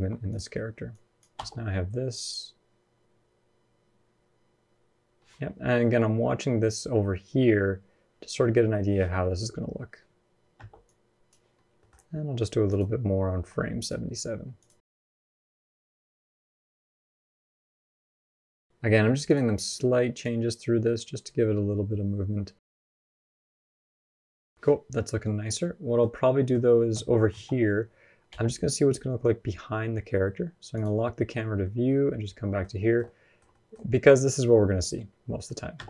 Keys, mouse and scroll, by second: 0.7 click, 1.2 space, 9.1 scroll down 3, 9.5-9.8 scroll up 1, 10.4 space, 10.7 click, 11.4 scroll up 2, 11.6 middle click, 12.5 click, 13.2 r, 14.4 click, 14.8-17.3 typing, 15.1 click, 16.1 click, 16.6 click, 17.2 click, 18.7 g, 19.5 r, 20.6 middle click, 22.5 scroll down 2, 22.6 middle click, 22.8 scroll up 3, 22.9 space, 25.4 middle click, 25.9 scroll down 1, 26.0 scroll up 2, 26.2 middle click, 27.1 KP_0, 28.1 n, 30.5 click, 31.0 n, 31.4 middle click, 32.6 shift+middle click, 32.8 middle click, 33.2 scroll down 1, 33.3 shift+middle click, 33.9 middle click, 34.6-34.9 scroll down 2, 34.8 middle click, 34.8 scroll up 1, 35.6 space.